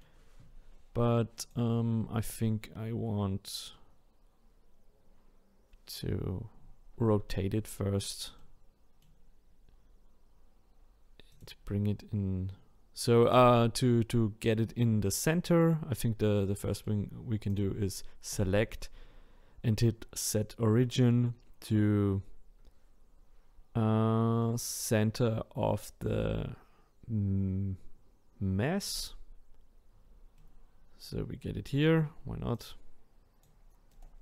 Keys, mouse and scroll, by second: 1.4 click, 2.6-4.0 scroll down 1, 7.3-8.3 middle drag, 8.3 scroll down 1, 8.4-11.3 middle drag, 11.3-13.4 drag, 16.4-17.5 middle drag, 17.5 click, 18.3-21.5 right drag, 30.4-32.5 middle drag, 32.5 click, 33.9-34.2 right drag.